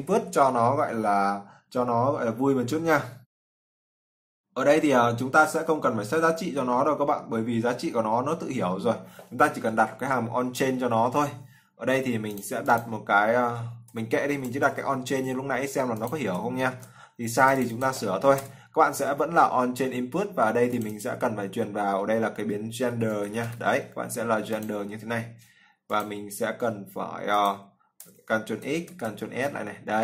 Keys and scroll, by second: 16.5 ctrl+v, 28.7 ctrl+x, 29.1 ctrl+s.